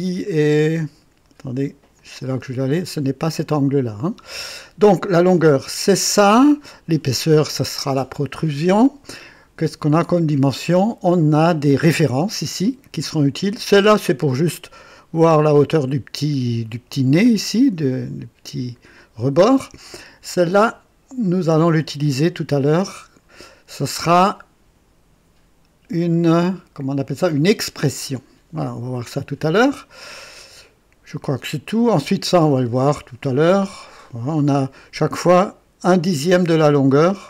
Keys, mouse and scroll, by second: 0.7 click, 1.9 click, 17.9-19.0 drag.